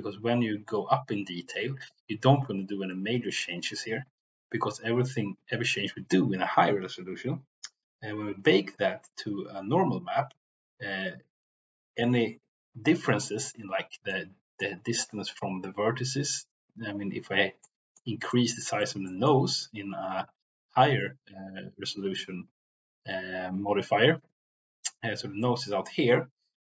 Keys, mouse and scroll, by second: 14.0 middle click, 17.6 middle click, 18.2 middle click, 18.8-19.3 middle drag.